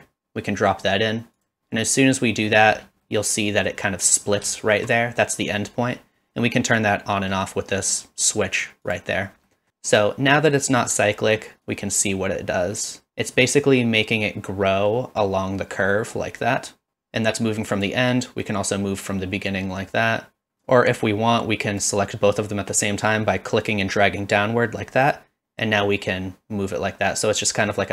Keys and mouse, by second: 2.2 middle drag, 3.0-3.7 middle drag, 4.5 shift+middle drag, 5.0 middle click, 7.9 click, 8.2 click, 8.6 click, 8.8 click, 9.5 middle click, 11.6-17.9 drag, 18.5-20.5 drag, 20.7-21.8 drag, 23.7-27.9 drag.